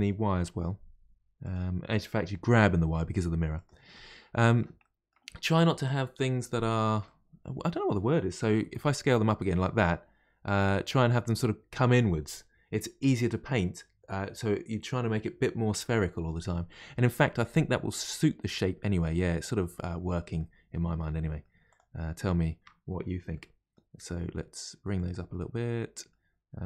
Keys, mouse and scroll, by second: 3.9-8.6 middle drag, 8.6 s, 17.1-18.0 scroll down 1, 18.0-20.7 middle drag, 20.7-21.1 scroll up 1, 21.1 middle click, 21.7 click, 23.3 middle click, 23.9 g, 25.3-26.6 middle drag.